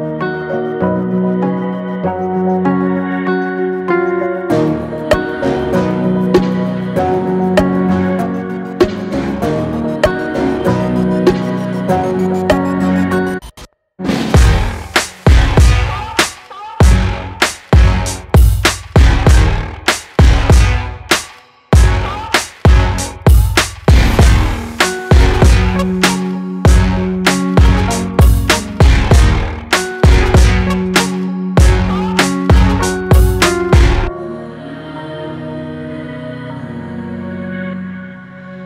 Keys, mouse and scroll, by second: 2.1-7.2 alt+shift+drag, 7.2-9.5 alt+shift+drag, 9.5-12.3 shift+drag, 18.7-22.8 drag, 22.9 click, 23.0 click, 25.8 click, 29.1 click, 32.9 click.